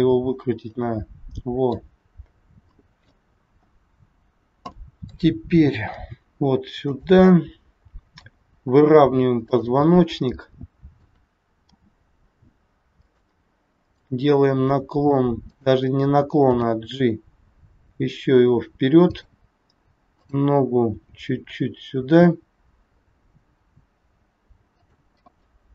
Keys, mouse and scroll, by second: 2.0 scroll down 2, 2.6 middle click, 3.4 scroll up 2, 4.7 middle click, 4.7 scroll up 1, 6.0 g, 7.2 middle click, 8.6 scroll down 1, 9.4 click, 10.0-10.4 scroll down 2, 10.4 middle click, 11.6 r, 13.8 click, 15.5 click, 16.5 g, 20.1 click, 21.0 g, 25.2 middle click.